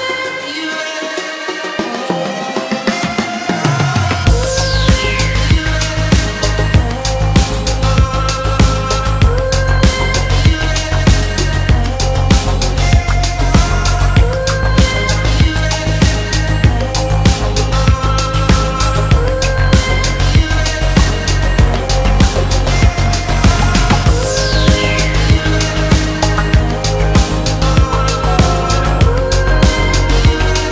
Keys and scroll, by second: 1.1 shift+space, 8.7 shift+space, 27.0 2, 29.3 space, 29.5 Escape.